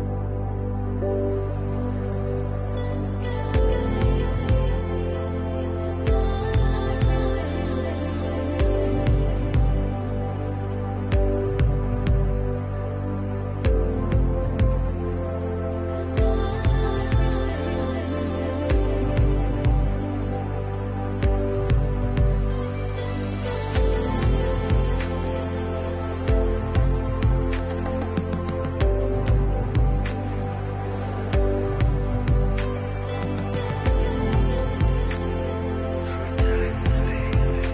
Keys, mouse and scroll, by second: 1.1 Tab, 1.7 alt+click, 2.2 alt+shift+click, 2.8 middle click, 3.9 alt+shift+click, 4.4 right click, 6.7 middle click, 8.1 l, 9.3 Tab, 10.9 l, 11.7 u, 11.9 u, 12.6 scroll down 4, 13.1 shift+middle click, 13.5 scroll down 1, 13.9 shift+middle click, 14.6 h, 15.0 middle click, 18.2 scroll down 3, 18.5 shift+middle click, 19.1 middle click, 19.9 shift+middle click, 20.2 middle click, 22.2 click, 22.5-22.9 scroll up 2, 23.0 shift+middle click, 24.2 middle click, 25.4 alt+shift+click, 25.8 shift+middle click, 26.3 Tab, 27.0 shift+middle click, 27.4 click, 28.5 alt+click, 29.7 alt+shift+click, 30.5 shift+middle click, 31.5 middle click, 34.4 alt+shift+click, 35.2 middle click, 36.6 alt+shift+click, 37.3 shift+middle click.